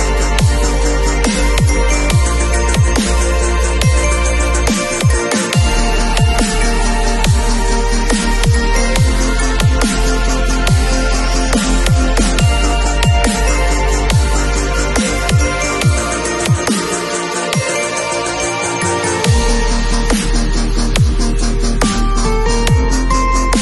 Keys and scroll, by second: 0.3 ], 5.5 ], 8.5 [, 11.1 space.